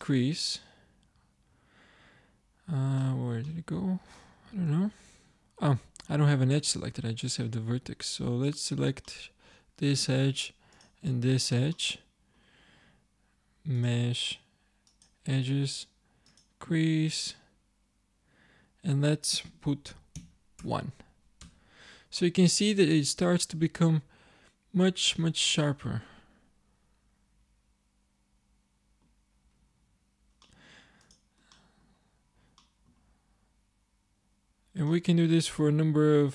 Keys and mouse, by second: 3.2 middle click, 4.7 shift+e, 6.0 Escape, 6.7 ctrl+Tab, 9.1-11.8 drag, 11.8 middle click, 12.5 click, 21.5 Tab, 29.2-32.2 middle drag, 32.2 click, 32.8-36.3 middle drag.